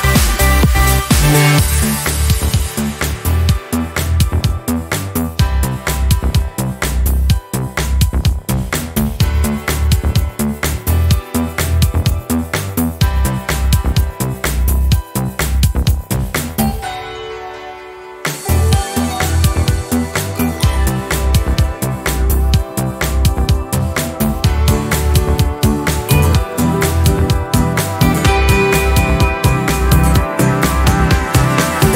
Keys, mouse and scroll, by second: 1.7 ctrl+shift+9, 6.1 click, 7.9 click, 10.1 ctrl+shift+9, 12.6 9, 17.5-20.7 drag, 21.7 ctrl+shift+9, 26.7 ctrl+d, 29.0 click, 29.1 scroll up 1, 30.8 click.